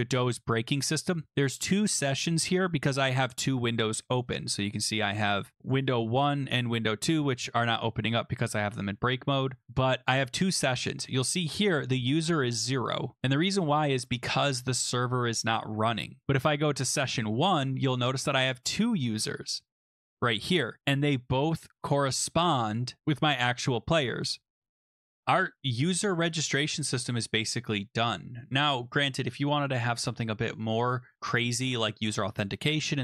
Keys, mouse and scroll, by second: 5.5 click, 5.7 click, 6.7 click, 11.5 scroll down 2, 11.6-12.0 scroll, 13.8 scroll, 15.5-16.0 scroll, 16.2-17.0 scroll, 17.0 click, 17.7 scroll, 18.3 click, 18.7 scroll, 20.6 click, 20.9-21.8 scroll, 21.8-22.5 scroll, 22.7 click, 24.5-25.2 scroll, 25.2 click, 26.6 click, 30.6 click, 32.8 click.